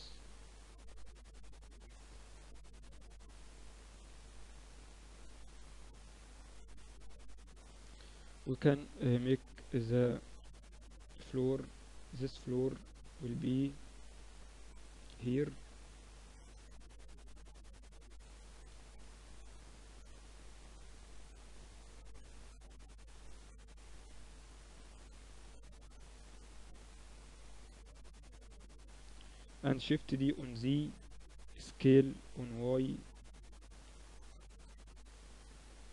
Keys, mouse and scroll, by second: 0.2 z, 0.6 middle click, 5.4 middle click, 6.4-9.3 middle drag, 7.2 KP_1, 7.6 KP_3, 9.3 z, 12.5-14.7 middle drag, 14.7-16.5 drag, 16.5-19.2 middle drag, 19.2 shift+a, 22.4-24.0 middle drag, 22.6 s, 25.4 s, 27.3-29.2 drag, 29.2-30.3 middle drag, 29.3 shift+d, 31.1 s, 33.0 s.